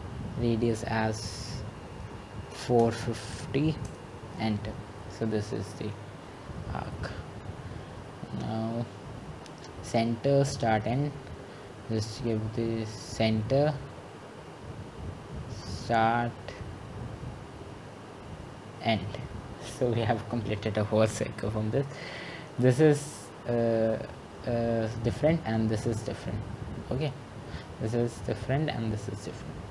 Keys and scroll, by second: 4.0-4.7 typing, 6.9-7.6 typing.